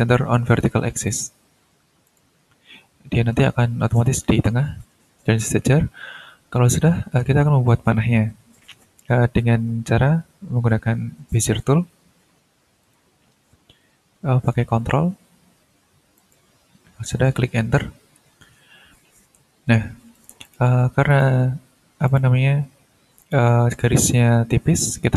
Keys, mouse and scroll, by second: 1.1 click, 2.0 click, 2.5-3.2 ctrl+scroll down 2, 3.2-4.0 ctrl+scroll up 4, 11.3 click, 12.8 click, 16.1 ctrl+click, 18.1 Return, 20.1-20.7 drag, 21.1 click, 22.0 click, 23.2 click.